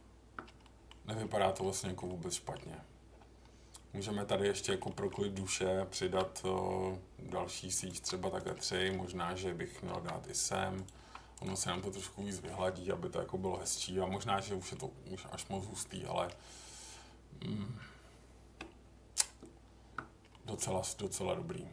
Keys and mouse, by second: 0.6 middle click, 1.3 middle drag, 2.0-2.5 middle drag, 3.1 Tab, 4.8 middle click, 6.0 ctrl+r, 7.9 Escape, 8.6 middle click, 9.9 ctrl+r, 10.9 Escape, 11.3 click, 11.6 middle click, 12.2 middle click, 14.7-16.2 middle drag, 18.6 Tab, 20.3 middle click.